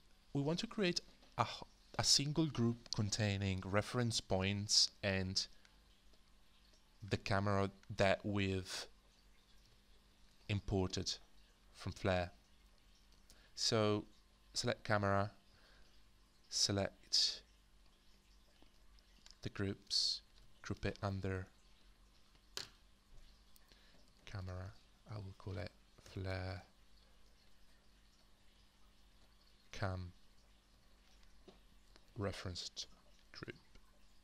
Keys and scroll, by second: 9.6 h, 20.4 ctrl+g, 23.8-27.1 typing, 28.8-34.0 typing.